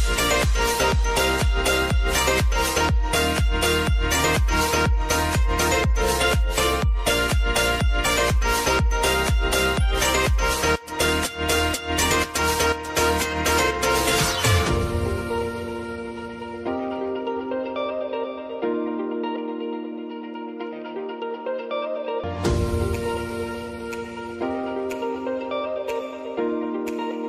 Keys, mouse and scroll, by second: 0.8 click, 2.4 Return, 3.2 click, 6.8 right click, 7.8 click, 9.9 Return, 11.2-12.3 typing, 14.3 Return, 17.2-20.0 drag, 20.9 ctrl+i, 24.5-27.0 drag, 27.0 s.